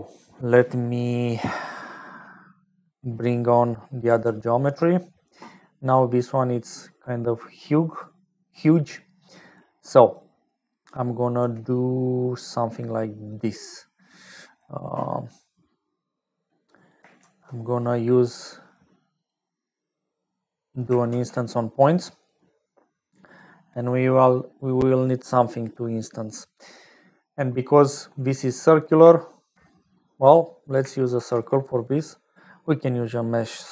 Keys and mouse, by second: 2.5 middle click, 3.2 middle click, 4.3 ctrl+alt+click, 6.2 click, 9.1 click, 10.1 click, 11.0 click, 11.7 g, 13.2-14.4 drag, 14.8 middle click, 17.1 shift+a, 21.0 shift+a, 24.3 middle click, 25.9 middle click, 27.4 middle click, 31.1 shift+a.